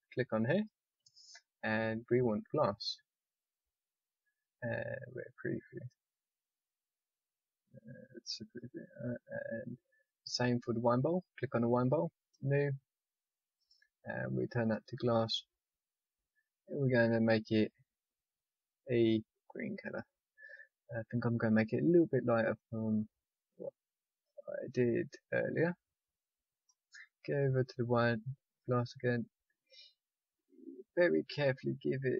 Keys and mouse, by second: 8.4-10.7 drag, 17.0-22.0 drag, 26.6-32.0 middle drag.